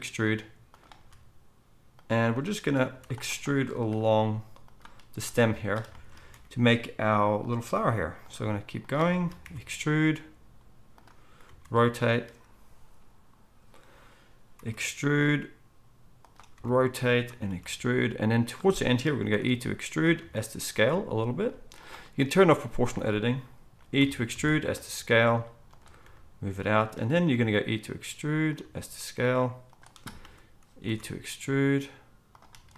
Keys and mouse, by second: 0.9 s, 2.4-7.7 drag, 2.9 z, 4.1 s, 5.8 shift+middle click, 6.3 e, 7.1 middle click, 7.7 r, 8.3 s, 9.4 e, 11.4 r, 14.6 e, 16.5 r, 17.5 e, 19.4 e, 20.1 s, 24.0 e, 26.0 g, 27.3 e, 28.6 s, 30.8 e.